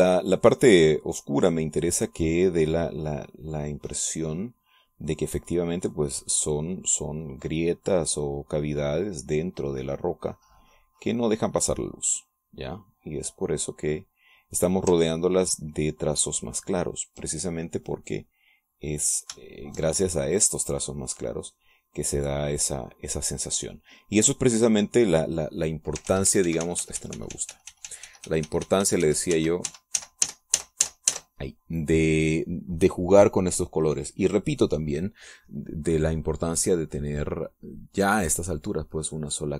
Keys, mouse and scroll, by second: 1.0-4.9 drag, 5.7-12.9 drag, 13.0-14.3 drag, 14.4-16.0 drag, 17.8 ctrl+click, 19.5 click, 19.8 click, 20.7-26.6 shift+drag, 27.4 ctrl+z, 36.7-39.5 middle drag.